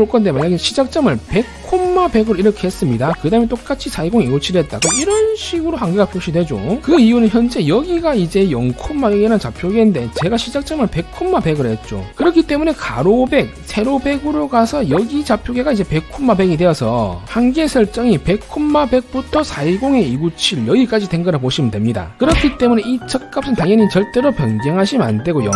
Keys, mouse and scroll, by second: 1.3 1, 2.1 1, 22.9-23.9 typing.